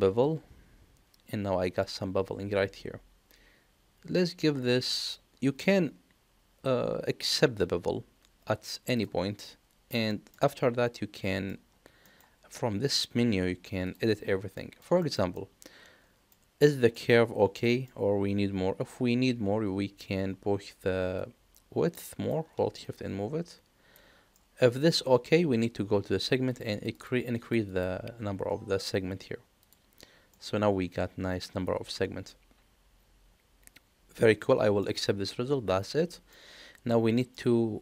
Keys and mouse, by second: 9.3 middle click, 10.0 shift+middle click, 10.5 middle click, 12.0 middle click, 14.5 middle click, 15.0 shift+middle click, 15.3 middle click, 16.9 middle click, 21.1-22.3 drag, 22.8-23.9 shift+drag, 24.3 middle click, 26.6 click, 26.7 click, 26.9 click, 27.3 click, 27.7 click, 29.5 click, 30.3-34.8 middle drag, 35.7 click, 36.3-37.3 middle drag.